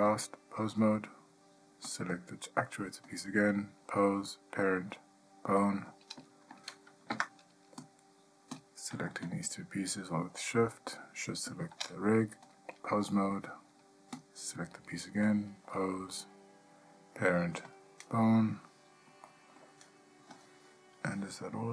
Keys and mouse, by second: 0.3-1.0 drag, 2.1 click, 3.4-5.9 drag, 7.3 Tab, 12.6-13.3 drag, 15.4-17.9 drag, 19.4-19.8 ctrl+middle drag.